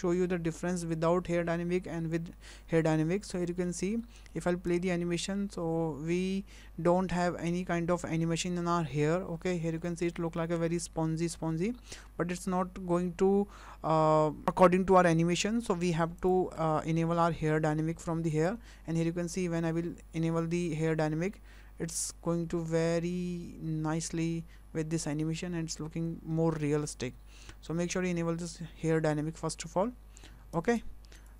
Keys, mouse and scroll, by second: 3.1 scroll down 3, 3.5 shift+middle click, 4.0 middle click, 4.7 space, 9.3 space, 9.5 scroll down 3, 9.9 shift+middle click, 10.3 scroll up 3, 10.6 space, 13.1-13.5 scroll down 3, 13.7 space, 16.2 click, 18.3 click, 19.6 shift+middle click, 21.2 space, 30.7 space, 31.1 click.